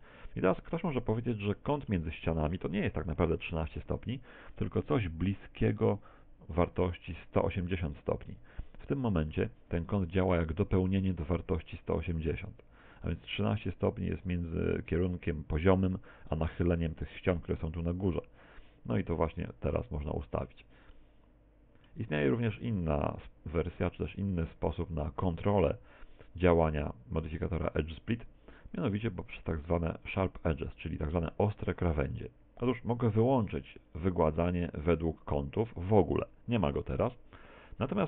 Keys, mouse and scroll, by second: 1.6 shift+middle click, 2.8 KP_7, 3.8 shift+middle click, 20.3 click, 21.0 middle click, 22.8 click, 34.0 click, 36.2 middle click.